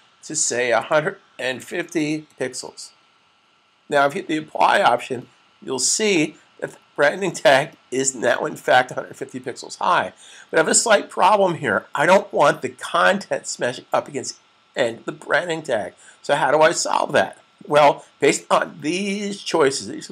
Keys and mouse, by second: 3.1-3.8 typing, 4.4 click, 16.5 click.